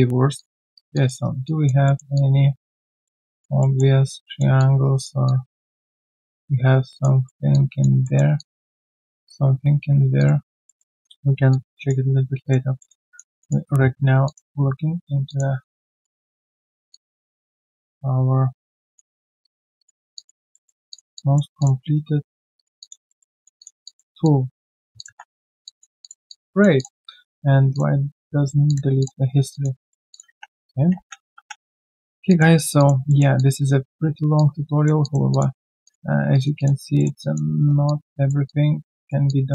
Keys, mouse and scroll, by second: 0.7 alt+right click, 0.9 alt+click, 1.2 alt+right click, 1.4 alt+click, 1.8 alt+middle click, 2.1 alt+click, 2.9 alt+middle click, 3.2 alt+click, 3.6 alt+middle click, 3.8-4.2 alt+scroll down 1, 4.2 alt+middle click, 4.5 alt+click, 5.8 alt+right click, 6.0 alt+click, 7.2 alt+middle click, 7.5 alt+click, 8.0 alt+middle click, 8.3 alt+click, 8.7 alt+middle click, 10.6 alt+click, 12.7 alt+middle click, 13.0 alt+middle click, 14.2 alt+click, 15.2 alt+click, 19.1 double click, 20.1 alt+click, 20.5 alt+middle click, 21.1 alt+click, 21.9 right click, 22.7 right click, 23.0 alt+middle click, 23.3 alt+click, 23.8 alt+click, 25.6 alt+click, 26.0 alt+click, 29.2 alt+click, 29.3 alt+right click, 29.5 alt+click, 29.8 alt+middle click, 30.5-31.8 typing, 32.2 alt+click, 32.5 alt+right click, 32.7 alt+click, 33.0 alt+middle click, 33.3 alt+click, 34.1 alt+right click, 34.3 alt+click, 35.5-35.9 scroll down 1, 36.3 alt+right click, 36.5 alt+click, 36.9 alt+middle click, 37.2 alt+click, 37.5 alt+right click, 37.8 alt+click.